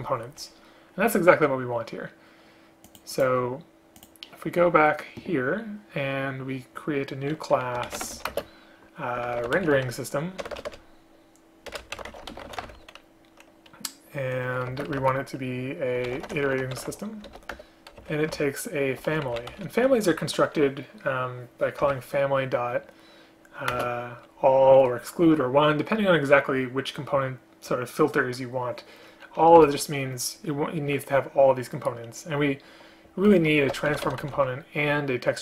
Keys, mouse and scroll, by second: 8.4 space, 10.5 BackSpace, 10.7 BackSpace, 10.8 BackSpace, 14.8 space, 17.6 Return, 18.4 ctrl+p, 23.8 ctrl+space, 29.7 Return.